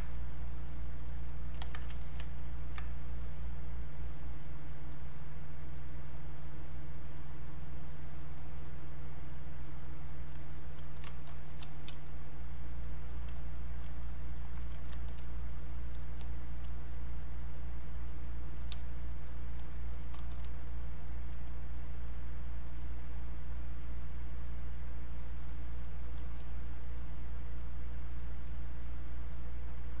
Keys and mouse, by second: 0.7 click, 1.6 ctrl+z, 2.0 alt+click, 2.4 ctrl+right click, 3.9 click, 11.6 e, 12.1 click, 14.5 alt+click, 15.7-18.9 drag, 18.9 alt+click, 19.9-21.4 drag, 23.0-24.3 alt+drag, 24.3-26.8 drag, 26.8-30.0 drag.